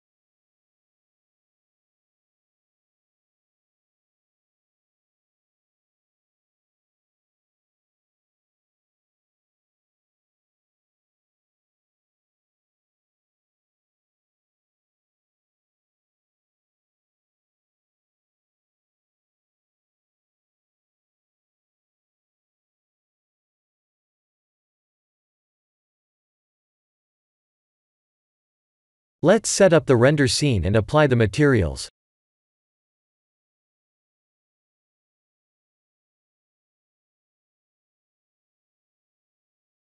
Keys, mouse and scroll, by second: 0.5 middle click, 3.6-4.6 scroll down 4, 4.3 click, 4.6 KP_1, 5.5-5.9 scroll down 2, 6.1 shift+middle click, 6.8 click, 7.1 shift+z, 8.0-8.3 scroll up 2, 8.3 Tab, 9.4 click, 10.1 Tab, 10.5 click, 12.8 click, 14.3 click, 16.7 click, 20.9 click, 21.7 click, 22.0 click, 22.9 click, 25.2 click, 26.5 click, 26.9 right click, 28.5 click, 29.4 click, 29.7 click, 30.5 Tab, 35.1 alt+click, 36.0 3, 36.5 alt+click, 37.9 alt+shift+click, 39.7 click.